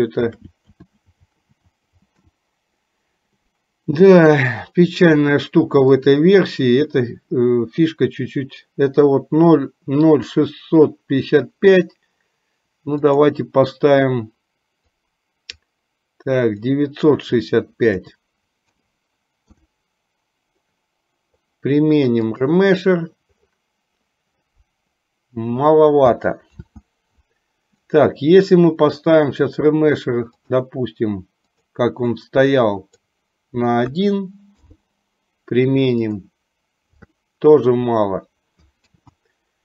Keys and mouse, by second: 0.2 shift+r, 0.9-2.2 shift+r, 6.2-22.8 drag, 26.7 ctrl+z, 29.1-39.6 drag.